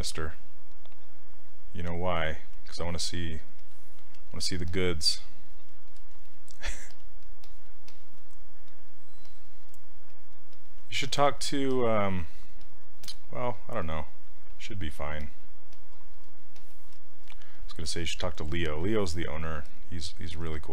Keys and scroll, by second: 6.9 s, 20.3 s.